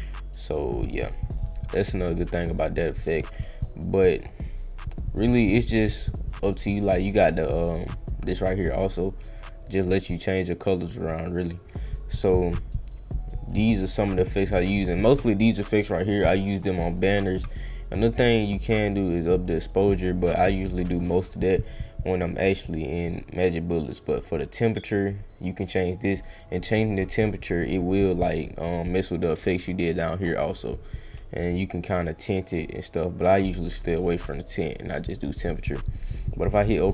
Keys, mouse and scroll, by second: 3.9-4.2 scroll up 1, 8.1-11.5 drag, 13.0-14.3 drag, 19.1 click, 24.0-26.3 drag, 29.6 click, 31.4-35.0 drag, 36.0 click.